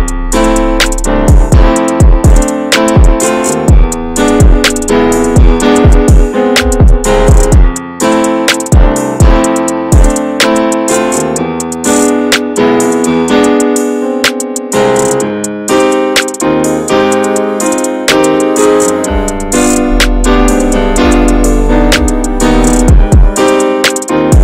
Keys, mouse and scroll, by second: 0.3 a, 0.6 a, 0.8-1.6 right drag, 1.6 scroll down 1, 1.9-5.2 middle drag, 5.2-6.0 scroll up 5, 5.5 shift+middle click, 6.0-7.6 middle drag, 7.6-8.1 scroll up 1, 8.1 click, 9.1 alt+shift+click, 10.3 alt+shift+click, 11.1 middle click, 11.9 alt+shift+click, 12.4 middle click, 13.2 alt+shift+click, 13.6-15.1 middle drag, 15.1 right click, 15.3 a, 15.6 a, 15.9 right click, 16.8-17.3 scroll down 2, 17.3 click, 17.5 a, 20.6-21.5 drag, 21.5 scroll down 3, 21.7 middle click, 22.4 shift+scroll up 1, 22.7 scroll down 2, 22.9-24.4 middle drag.